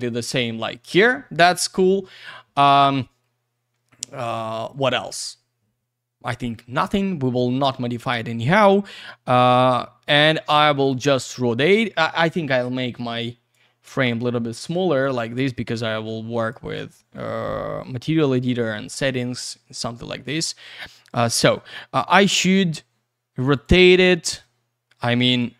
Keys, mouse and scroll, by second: 2.6 click, 10.3 click, 12.9 click, 14.2 click, 15.8 click, 17.7 middle click, 19.3 click, 23.5 click, 24.4 click.